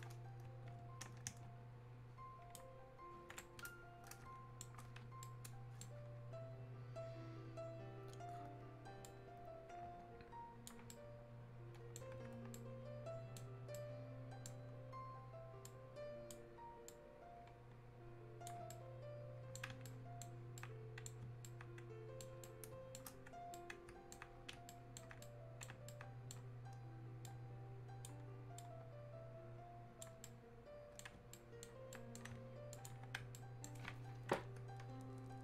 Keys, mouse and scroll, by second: 3.4-8.1 ctrl+alt+right drag, 9.0-10.9 ctrl+drag, 10.9-15.6 ctrl+right drag, 15.6-18.7 drag, 18.7-23.5 right drag, 23.5 right click, 25.2-27.2 right drag, 27.2-30.2 drag, 30.2 right click, 32.7 click, 33.3-35.4 right drag.